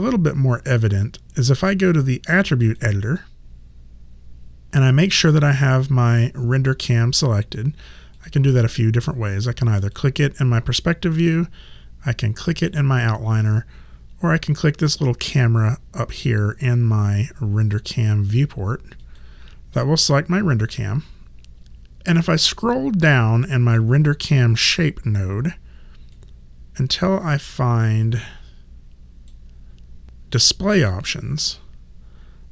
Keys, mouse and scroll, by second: 2.6 click, 8.2 click, 12.7 click, 19.0 click, 22.5 click, 26.2 click, 30.8 click.